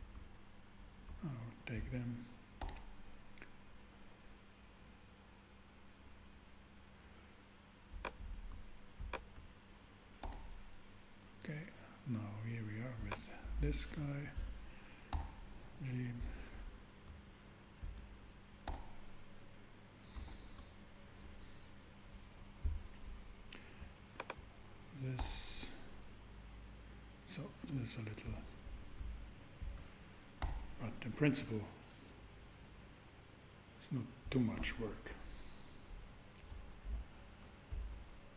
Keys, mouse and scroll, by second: 2.6 super+g, 8.0-9.1 drag, 10.2 g, 10.4 g, 15.1 g, 15.5 g, 18.6 super+g, 25.2 g, 25.4 g, 28.3 click, 30.4 g, 30.8 g.